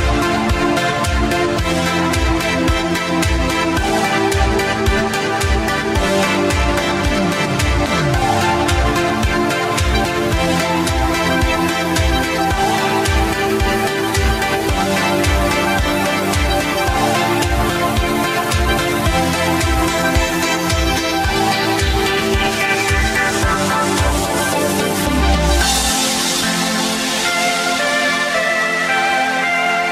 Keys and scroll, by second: 4.7 q, 10.2 w, 12.6 ctrl+z, 15.4 w, 18.2 ctrl+Left, 28.4 w, 28.8 r.